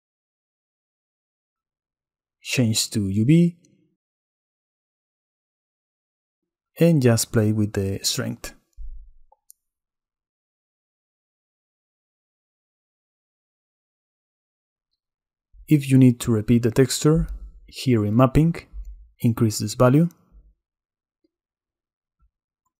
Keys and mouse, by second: 1.2 click, 4.0-5.8 middle drag, 5.8-7.1 drag, 7.1 middle click, 8.4-9.5 middle drag, 10.1-12.4 shift+middle drag, 12.6-15.1 middle drag, 15.1 click, 17.3 click, 19.2-21.1 drag.